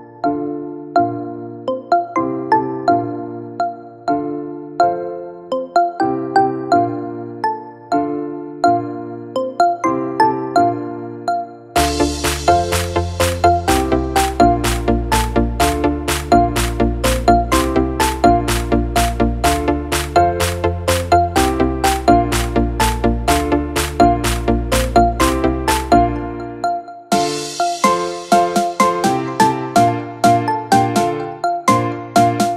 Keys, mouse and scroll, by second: 4.9 F9, 9.4 space, 13.7 space, 15.9 space, 27.3-28.5 typing, 29.3 Return.